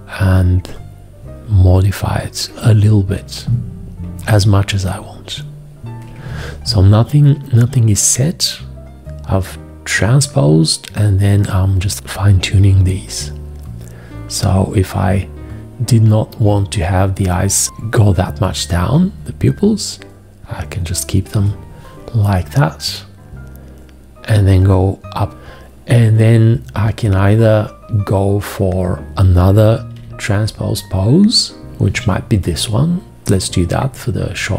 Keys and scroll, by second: 29.8 x.